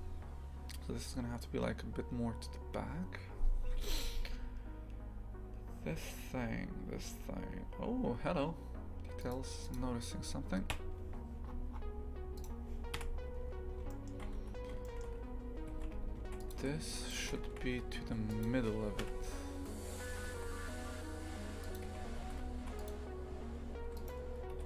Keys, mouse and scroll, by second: 9.7 click, 10.7 KP_3, 11.4-11.8 scroll down 12, 12.3 right click, 12.9 KP_Decimal, 13.9 shift+middle click, 14.3 Tab, 14.8 shift+middle click, 15.7 shift+f, 16.9 right click, 17.2 shift+f, 19.0 KP_3, 20.2 g, 21.8 shift+f, 23.8 2, 23.9 right click, 24.5 g.